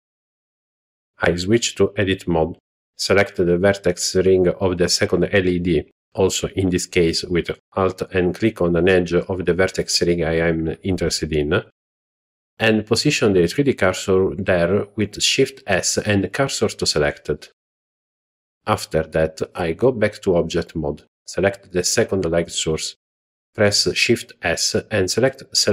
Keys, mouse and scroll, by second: 1.0 click, 2.0 Tab, 2.8 alt+click, 4.6 shift+s, 18.6 Tab, 19.7 click, 23.4 shift+s.